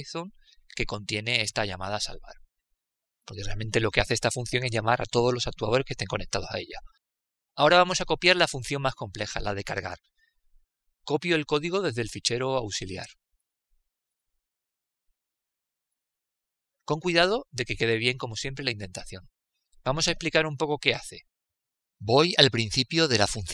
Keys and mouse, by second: 13.4 ctrl+v, 14.9-22.6 middle drag, 22.6 click.